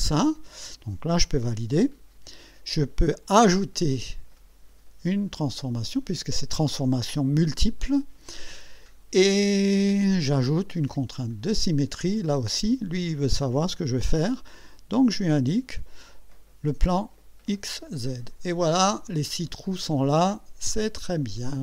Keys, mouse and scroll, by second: 1.8 click, 7.6 right click, 11.2 click, 15.0 click, 17.0 click, 19.8 click, 20.8-21.6 drag.